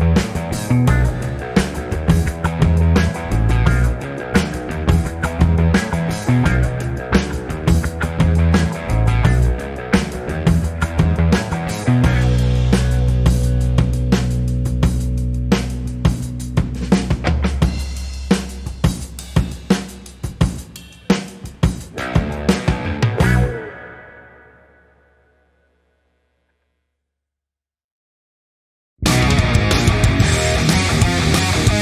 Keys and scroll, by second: 2.9-4.0 typing, 4.7 Return, 11.2-12.1 typing, 12.6 Return, 17.1 v, 18.4 Down, 18.8 Down, 19.2 Down, 20.2 Up, 26.3 ctrl+j.